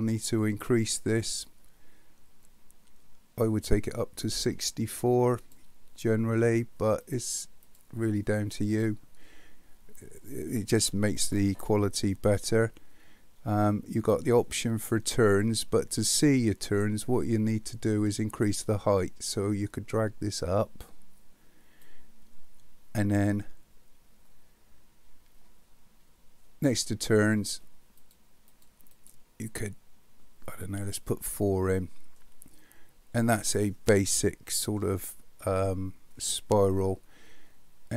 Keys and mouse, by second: 7.0 click, 19.3-21.9 drag, 28.5 click, 28.9 click, 31.5 middle click, 33.8-34.8 middle drag.